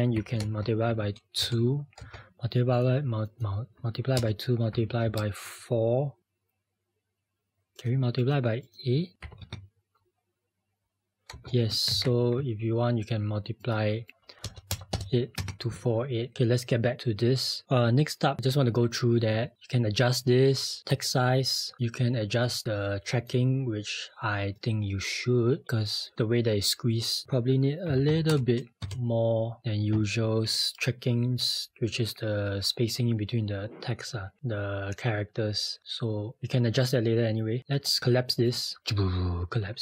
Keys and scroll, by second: 0.1-0.9 typing, 7.5-9.2 typing.